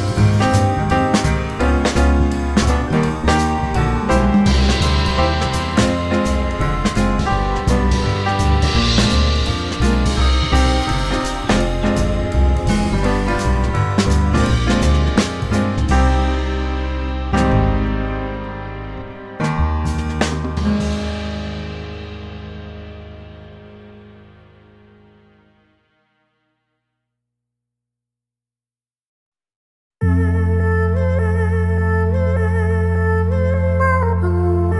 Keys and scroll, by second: 0.1 F4, 1.3 F3, 2.5 F3, 3.0 F4, 3.1 w, 3.3 F4, 4.2-5.0 typing, 8.5 Return, 9.6 F3, 9.9 F4, 10.8 F4, 11.6 F4, 13.4 F4, 15.0 F4, 16.7 F4, 17.2 ctrl+s, 18.5-22.0 typing, 22.2 F4, 27.2-28.1 typing, 28.6 ctrl+t, 29.7 2, 29.9 F3, 30.4 ctrl+r, 30.7 ctrl+c, 33.2 e.